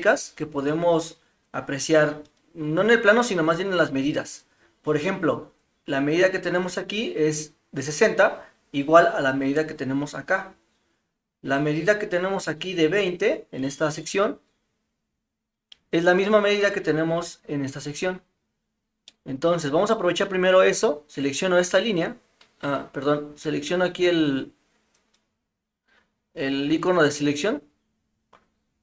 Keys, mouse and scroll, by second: 19.1-19.6 middle drag, 21.3 click, 24.9 click.